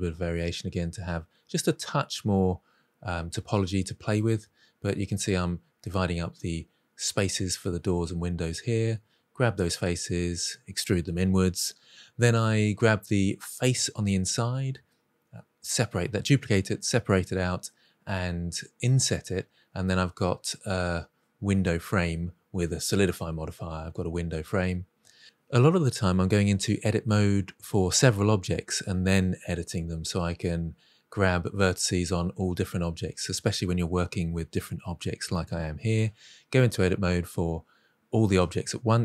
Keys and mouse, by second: 0.7 click, 0.8 middle click, 1.2 ctrl+r, 2.0 click, 2.1 middle click, 2.7 ctrl+r, 2.7 click, 3.0 middle click, 3.2 middle click, 3.6 z, 3.6 o, 3.8 g, 3.9 z, 4.2 click, 4.4 middle click, 5.0 alt+z, 5.4-8.8 typing, 5.7-6.1 right drag, 6.9 click, 7.3 click, 8.0-8.3 drag, 8.6 middle click, 9.3 middle click, 9.9 middle click, 10.1 middle click, 10.3 middle click, 10.7 shift+d, 10.9 y, 11.3 shift+drag, 12.1 Tab, 12.1 p, 12.8 Tab, 13.0 middle click, 13.2 middle click, 13.9 click, 14.3 i, 15.1 Delete, 15.5 middle click, 15.9 middle click, 16.1 s, 16.2 shift+z, 16.6 shift+y, 17.2 middle click, 17.4 middle drag, 17.6-19.0 drag, 19.3 g, 19.9 y, 20.0-20.4 middle drag, 20.4 Tab, 20.9 Tab, 21.0 click, 21.2 Tab, 21.6-25.6 typing, 21.7 alt+z, 21.8 click, 22.4 click, 22.8 click, 23.1 middle click, 23.4 click, 23.6 click, 23.7 middle click, 24.0 middle click, 24.1 click, 24.3 drag, 24.6 drag, 25.1 click, 25.4 middle click, 25.6 click, 26.2 middle drag, 26.5 ctrl+r, 26.8 drag, 27.2 ctrl+z, 27.4 ctrl+r, 27.9 middle drag, 28.1 click, 28.2-29.9 typing, 28.4 click, 29.0 click, 29.2 drag, 29.6 click, 30.2 middle click, 30.6 middle drag, 31.2 Tab, 31.5 alt+z, 31.6 middle click, 31.7 drag, 31.9 Tab, 32.0 middle click, 32.2 3, 32.3 click, 32.7 shift+d, 32.8 y, 33.0 click, 33.1 p, 33.5 middle click, 33.7 middle click, 33.9 Tab, 34.3 click, 34.6 i, 35.1 shift+middle click, 35.5 Delete, 36.0 Delete, 36.4 1, 36.5 click, 36.8 g, 36.9 z, 37.4 middle click, 37.6 Tab, 38.1 click.